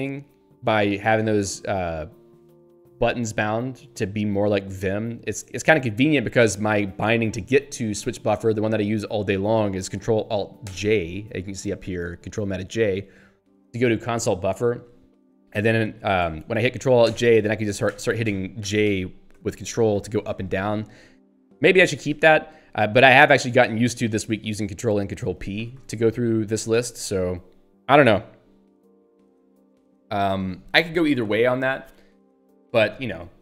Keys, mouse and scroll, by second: 6.2 ctrl+g, 10.7 ctrl+alt+j, 16.2 ctrl+g, 17.1 ctrl+alt+j, 17.9 ctrl+j, 19.3 ctrl+k, 19.9 ctrl+j, 20.6 ctrl+k, 22.2 ctrl+j, 23.7 ctrl+n, 24.1 ctrl+p, 24.7 ctrl+n, 25.6 ctrl+p, 26.7 ctrl+g.